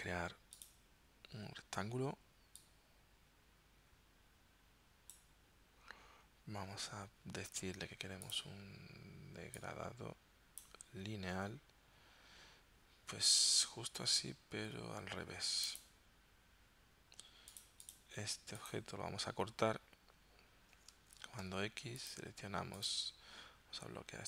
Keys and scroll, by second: 21.2 super+x.